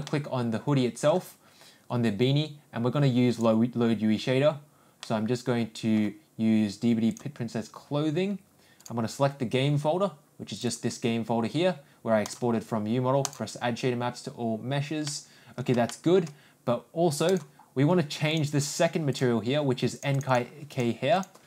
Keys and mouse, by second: 0.0-1.1 middle drag, 3.3 click, 5.0-5.9 middle drag, 7.1 click, 8.7 click, 13.2-13.6 drag, 15.0 middle click, 15.8 shift+middle drag, 17.2-18.3 drag, 19.1 click, 20.0-21.2 drag.